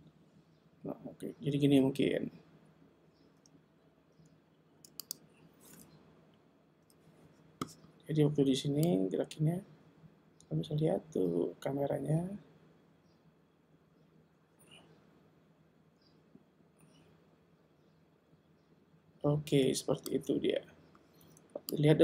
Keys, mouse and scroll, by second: 6.8 i, 8.9 click, 21.8 click.